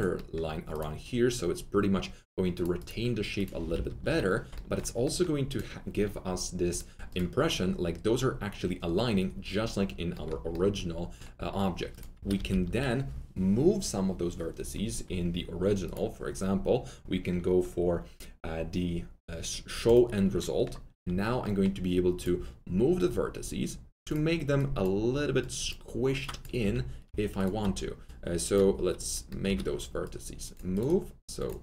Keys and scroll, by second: 3.5 F3, 3.6 F3, 3.8 F4, 12.1 alt+F3, 12.5 F4, 20.9 1, 26.5 F3, 27.0 F3, 27.5 F3, 29.4 F3.